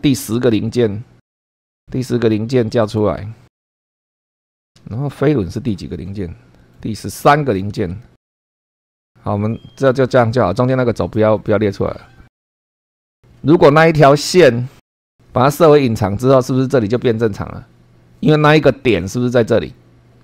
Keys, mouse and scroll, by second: 0.0 super+2, 1.3 scroll up 2, 2.8 click, 3.2 space, 3.6 scroll down 1, 7.8 super+2, 8.4 scroll down 4, 9.0 click, 9.0 space, 12.4 click, 12.7 click, 15.3 click.